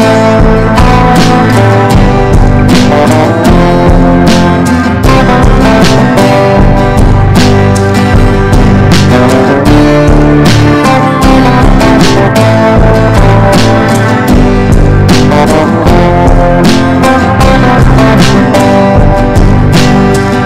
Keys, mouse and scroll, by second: 0.0 ctrl+d, 0.2-2.2 drag, 2.7 ctrl+d, 3.5-15.5 drag, 15.7-20.4 drag.